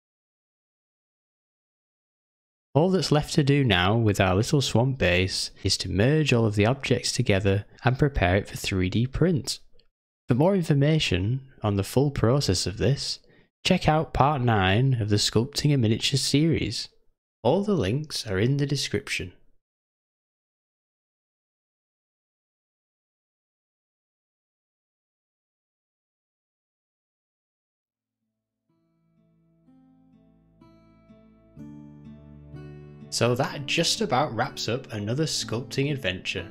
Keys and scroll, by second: 0.9 g, 8.6 alt+d, 14.2 s, 21.4 shift+`, 28.3 ctrl+s.